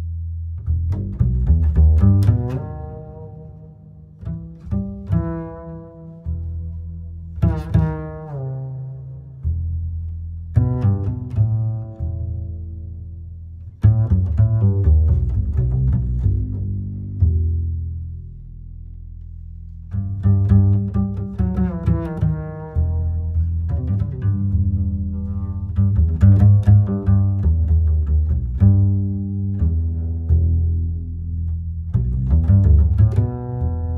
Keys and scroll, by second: 24.6 Home, 27.4 Delete.